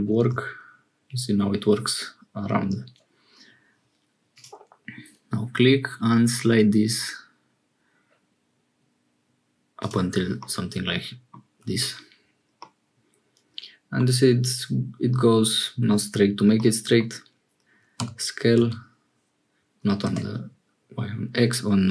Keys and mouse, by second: 0.1 ctrl+r, 10.4-11.4 middle drag, 12.5-14.0 middle drag, 16.6 middle click, 18.0 s.